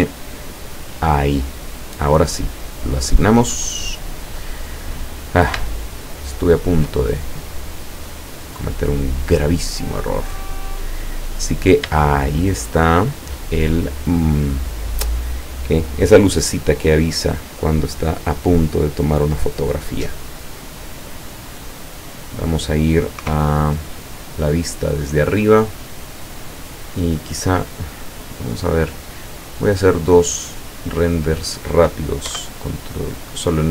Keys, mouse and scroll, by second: 0.3 click, 2.8 click, 3.5-4.0 scroll down 1, 4.2-5.0 scroll down 2, 5.7 shift+middle click, 6.7 shift+middle click, 6.8-7.4 shift+scroll down 2, 7.5 middle click, 8.6 middle click, 10.0 middle click, 10.7 middle click, 11.2-11.9 scroll up 1, 12.1-13.3 shift+middle drag, 13.6 shift+middle click, 14.5 scroll down 1, 14.7 scroll up 1, 21.3-21.8 scroll down 1, 22.1-22.4 scroll up 2, 23.2 KP_0, 27.5-28.7 middle drag, 29.3-30.6 middle drag, 30.6-31.1 scroll up 2, 32.3 KP_1.